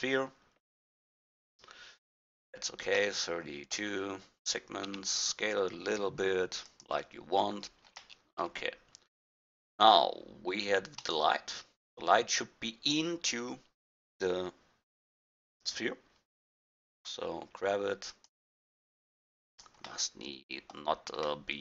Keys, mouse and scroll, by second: 4.9 s, 9.8-11.0 middle drag, 11.0-12.3 drag, 15.2 KP_1, 17.0 g, 18.8 g.